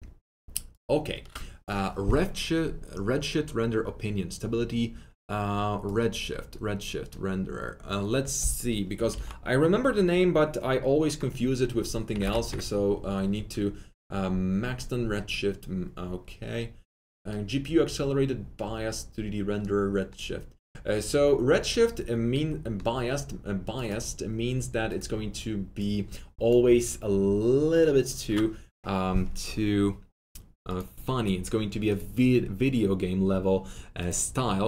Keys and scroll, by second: 9.1 ctrl+c, 12.2 ctrl+v, 12.4 Return.